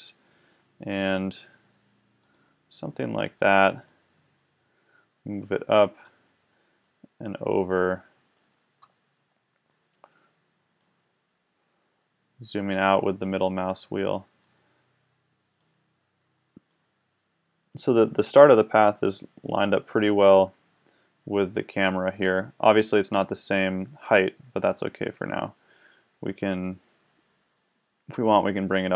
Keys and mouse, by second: 2.3-5.6 drag, 6.8-8.7 drag, 9.7-16.3 drag, 16.7 click, 19.6-21.0 middle drag, 22.7 middle click, 26.9-28.9 middle drag.